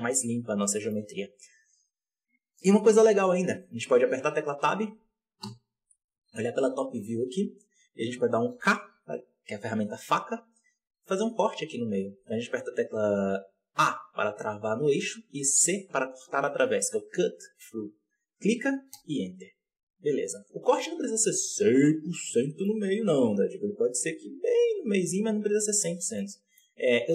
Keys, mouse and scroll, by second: 0.4-1.4 scroll down 6, 0.7 middle drag, 2.4-3.2 scroll down 3, 3.2 right click, 3.7 Tab, 4.2 scroll down 4, 5.3 KP_7, 6.2 scroll up 1, 6.9 z, 8.4 k, 19.9 scroll down 2, 20.2 alt+a, 21.1 click, 21.4-22.2 scroll up 10, 22.2-23.6 shift+middle drag, 23.6 click, 25.0 scroll down 4, 25.2 z, 25.8 scroll down 3, 26.1-26.6 middle drag, 26.6 scroll up 4, 26.9 Tab.